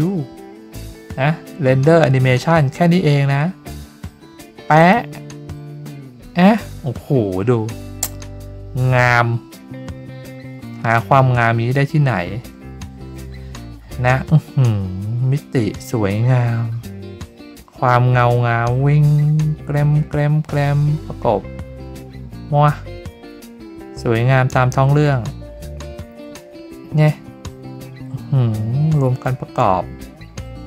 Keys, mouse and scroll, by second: 4.8 click.